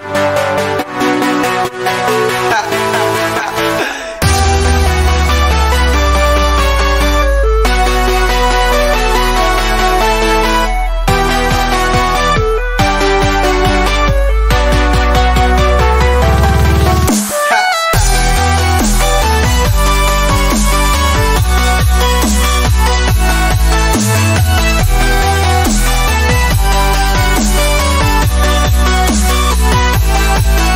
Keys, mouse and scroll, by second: 11.6 scroll, 21.7 typing, 23.0 typing.